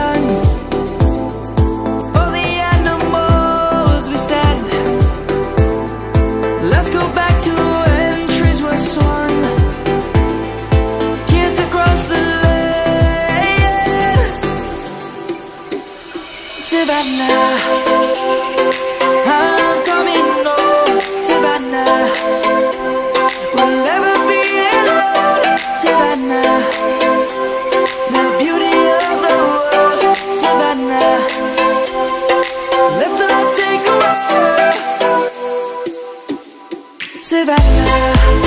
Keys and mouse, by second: 0.1 click, 5.8 click, 12.7 middle click, 16.7 shift+middle click, 17.4 click, 17.7 Tab, 19.9 Tab, 20.5 shift+a, 22.1 click, 26.2 click, 27.5 s, 28.5 click, 29.6 s, 30.0 x, 32.3 click, 32.8 s, 36.1 s.